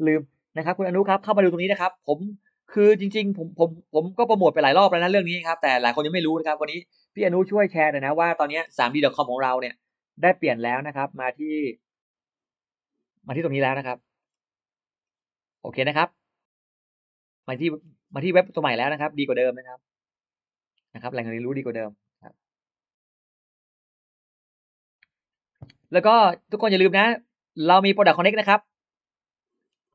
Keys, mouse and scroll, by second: 1.2-1.8 scroll down 2, 5.4 click, 13.2-13.8 scroll down 2, 14.0-14.3 scroll down 2, 14.9-16.5 scroll up 8, 16.9 middle click, 17.3 middle click, 17.7 middle click, 18.1 middle click, 19.1 middle click, 27.6 click, 28.6 click, 29.5-29.8 scroll down 1, 29.7 middle click.